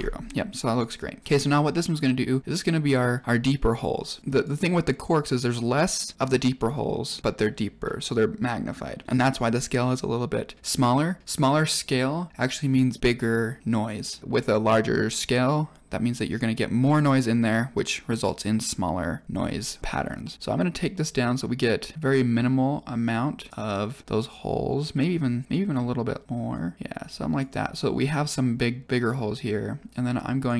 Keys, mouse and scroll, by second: 1.2 click, 4.2 click, 20.2 click, 25.0-25.5 scroll up 8, 25.4-25.7 middle drag, 26.4 click, 28.8 click.